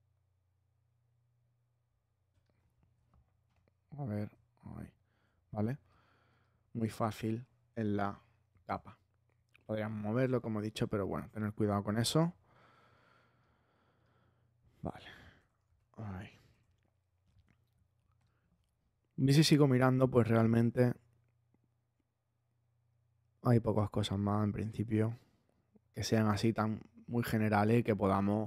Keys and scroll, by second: 7.7 super+-, 15.6 super+z.